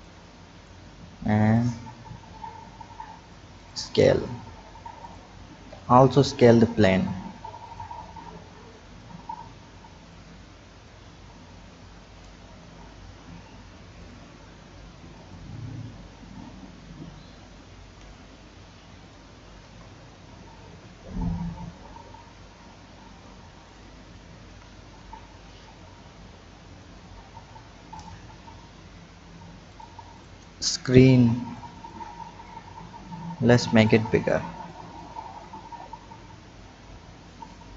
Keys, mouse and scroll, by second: 1.5-3.7 drag, 4.4 Tab, 5.1 drag, 5.7 Tab, 6.4 click, 7.6 click, 9.0-10.9 drag, 12.7 ctrl+z, 14.0 shift+click, 15.4-18.3 drag, 19.1 click, 19.6 Tab, 20.5 click, 23.6 click, 24.5 KP_7, 25.1-26.2 scroll up 2, 26.2-27.3 drag, 27.3 Tab, 27.9 click, 29.7 click, 30.1 drag, 31.2 b, 32.4-33.9 drag, 34.2 b, 35.5-37.7 drag.